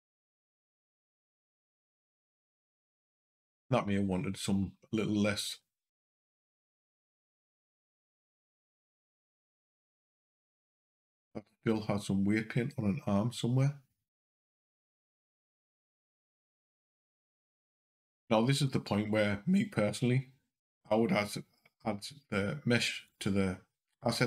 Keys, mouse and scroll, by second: 4.3 click, 5.3 g, 16.2 click, 22.9 click.